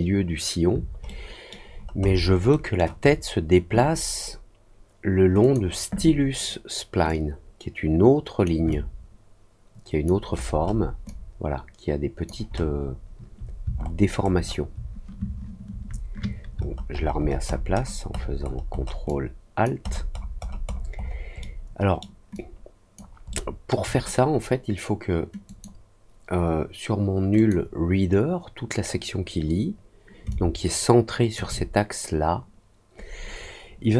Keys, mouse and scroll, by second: 1.0 alt+middle click, 1.6 alt+scroll up 1, 2.0 alt+scroll down 1, 2.4 alt+middle click, 5.3 click, 7.0-8.4 drag, 8.6-10.0 alt+drag, 10.2 alt+scroll down 1, 10.5 alt+middle click, 11.0-12.2 alt+drag, 12.4 alt+middle click, 13.7 alt+middle click, 14.1 alt+middle click, 14.4 alt+middle click, 16.5 alt+middle click, 16.9 alt+middle click, 17.1 alt+middle click, 17.4 alt+middle click, 17.7 alt+middle click, 18.1 alt+middle click, 18.4 alt+scroll down 1, 18.7 alt+middle click, 19.0 alt+click, 19.8-21.1 alt+scroll down 5, 21.3 alt+middle click, 22.3 alt+click, 23.2 alt+middle click, 25.4 click, 27.3 click, 30.2-31.3 alt+drag.